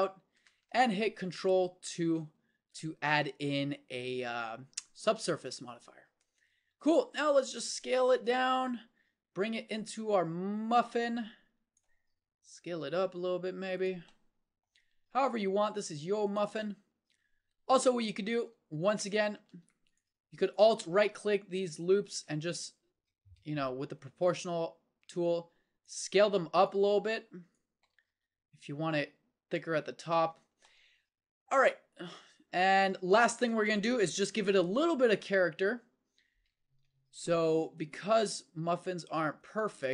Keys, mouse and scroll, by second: 2.1 ctrl+2, 6.7 s, 8.5-10.3 drag, 12.1 s, 15.6 s, 18.4 Tab, 19.4 a, 21.6 s, 28.1 s, 30.3 Tab, 35.6 KP_1, 37.8 Tab, 38.8 a, 39.6 z.